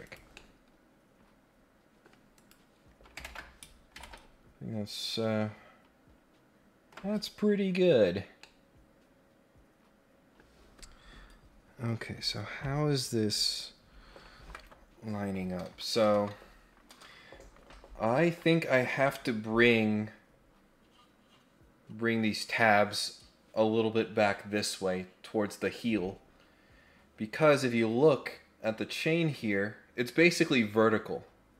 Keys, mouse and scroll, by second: 0.0 click, 0.3-2.0 middle drag, 2.3 click, 4.0 ctrl+Tab, 8.2 scroll up 1, 8.3 scroll down 1, 8.4-10.4 middle drag.